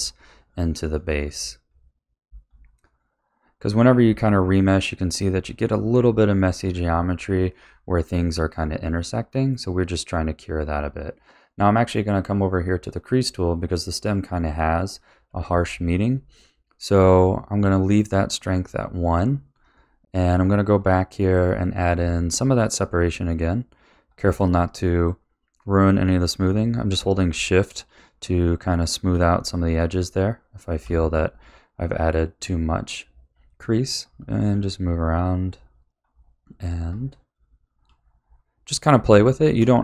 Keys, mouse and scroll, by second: 0.2 click, 1.6 middle click, 2.5 click, 3.4 middle click, 4.3 click, 5.2 middle click, 6.0 click, 6.8 middle click, 7.6 click, 8.5 middle click, 9.3 click, 15.3 click, 16.0 middle click, 18.5 click, 19.1 click, 19.5 click, 20.3 click, 20.8 click, 21.2 click, 21.6 click, 21.9 click, 22.3 middle click, 23.4 shift+click, 23.7 shift+click, 24.1 shift+click, 24.5 middle click, 25.3 click, 25.8 click, 26.2 click, 26.6 middle click, 27.2 shift+middle click, 28.4 shift+click, 29.3 middle click, 29.9 shift+click, 31.0 middle click, 31.7 click, 32.2 click, 32.7 click, 33.2 middle click, 34.0 click, 34.5 click, 34.9 middle click, 35.6 click, 36.0 click, 36.9 shift+click, 38.1 middle click, 38.9 shift+click, 39.5 shift+click.